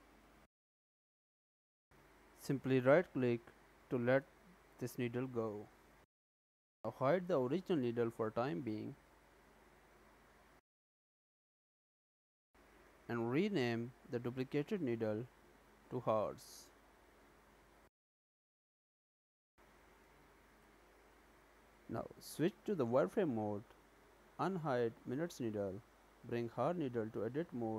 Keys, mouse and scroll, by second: 11.4 click, 13.2 click, 13.4 click, 22.4 click, 24.4 click, 25.8 Tab.